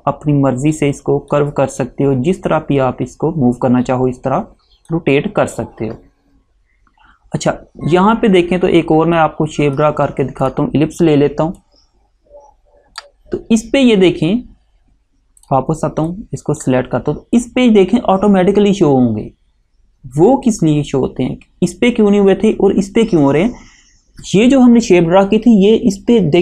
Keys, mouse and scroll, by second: 9.3 click, 15.5 click.